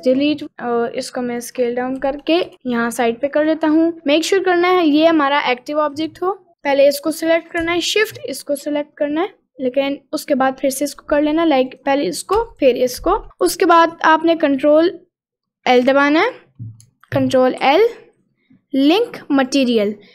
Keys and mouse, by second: 0.2 click, 0.5 s, 2.2 g, 7.2 click, 8.2 shift+click, 9.3 shift+click, 11.8 click, 15.8 click, 17.7 ctrl+l.